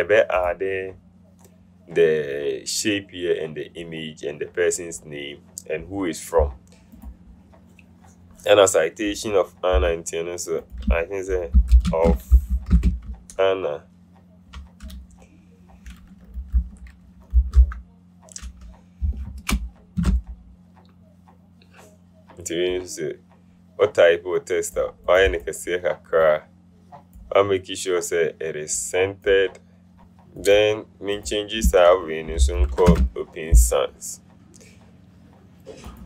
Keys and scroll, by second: 10.0 t, 11.4-13.3 typing, 16.6-18.2 typing, 19.3 Return, 20.1 v, 32.3-33.5 typing.